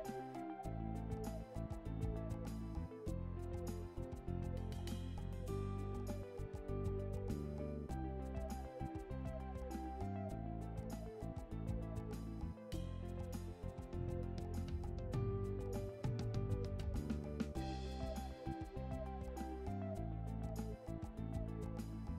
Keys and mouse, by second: 0.1 right click, 0.6 right click, 2.2 right click, 2.7 right click, 3.6 right click, 4.0 right click, 4.5 right click, 6.6 right click, 8.8 right click, 12.5 right click, 14.0 right click, 15.0 right click, 15.6 right click, 16.9 right click, 17.7 right click, 20.0 right click, 21.2 right click.